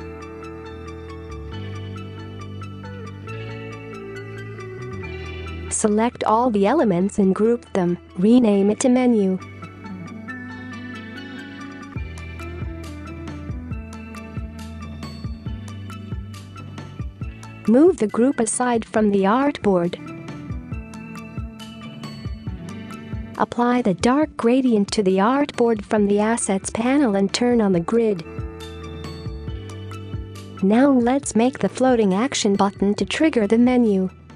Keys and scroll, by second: 0.0 typing, 8.6 ctrl+g, 10.5-11.5 typing, 27.2 space, 30.9-31.7 space.